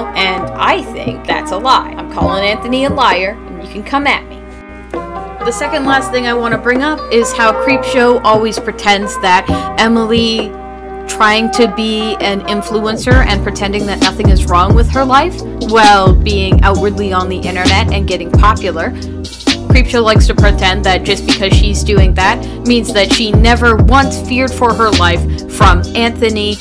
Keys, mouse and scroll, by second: 2.4 space, 3.4 space, 4.7 space, 5.6 space, 6.7 space, 7.9 space, 9.4 space, 9.8 space, 13.2 space, 13.7 space, 20.9 [, 25.0 space.